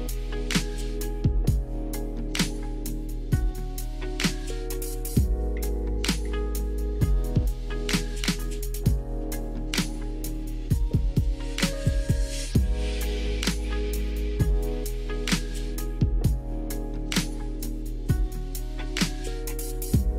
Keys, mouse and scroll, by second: 1.3 alt+shift+click, 2.1 shift+click, 2.4 shift+click, 2.7 shift+click, 3.7 click, 6.3 click, 8.1 click, 9.4 middle click, 10.6 click, 11.4 middle click, 13.2 shift+middle click, 15.2 click, 15.9 Tab.